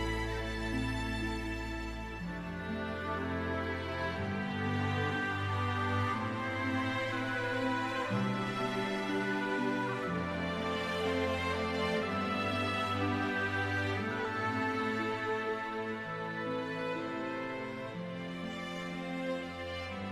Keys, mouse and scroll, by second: 1.0-1.5 scroll up 1, 6.4 right click, 8.5 click, 10.0 typing, 11.2 KP_Enter, 13.0 click, 13.9 e, 14.6 click, 16.3 w, 18.6 click.